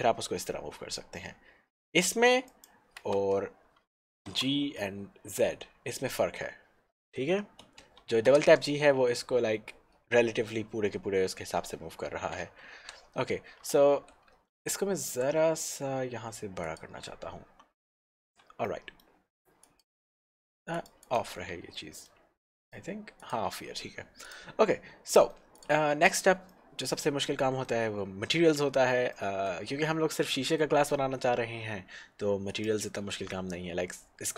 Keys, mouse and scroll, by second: 2.7 right click, 3.2 Escape, 4.3 g, 5.3 z, 7.7 Escape, 8.3 g, 12.8 Escape, 15.2 s, 16.8 click, 18.4 Tab, 18.7 middle click, 19.7 click, 21.6 Tab, 21.9 middle click, 22.7 click, 24.3 Tab, 24.3 click, 24.8 scroll down 1, 25.3 middle click, 25.6 click, 26.7 middle click, 30.1 middle click, 32.5 click.